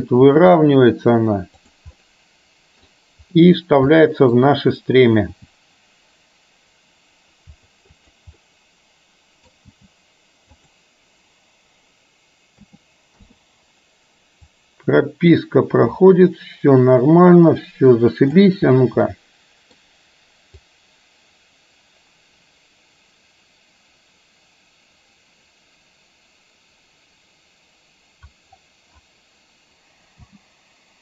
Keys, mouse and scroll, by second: 0.2 r, 2.0-3.0 middle drag, 4.1 middle click, 5.5 g, 8.4-9.6 middle drag, 9.9 g, 12.7 a, 13.2 i, 14.7-18.5 drag, 19.2-19.9 middle drag, 20.7-28.5 drag, 30.2 space.